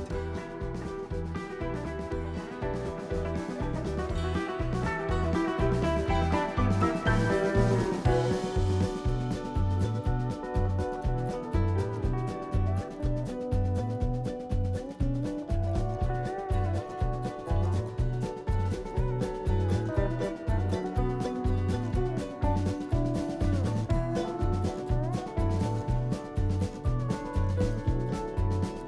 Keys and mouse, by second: 1.0-4.6 drag, 5.7 click, 6.9 click, 8.2 click, 10.9 click, 11.3 drag, 11.7-12.8 shift+middle drag, 12.8 Tab, 13.4 click, 14.7 shift+s, 15.7 Tab, 16.6 shift+a, 19.4-20.5 ctrl+middle drag, 20.5 s, 21.8-22.4 ctrl+middle drag, 22.4 n, 23.2 ctrl+a, 25.3 ctrl+a, 26.4-28.8 drag.